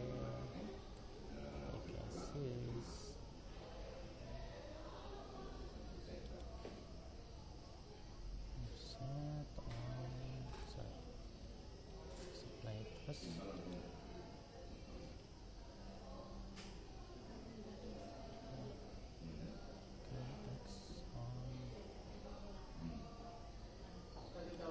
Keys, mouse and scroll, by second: 11.6 ctrl+z, 13.7 click, 17.9 alt+d.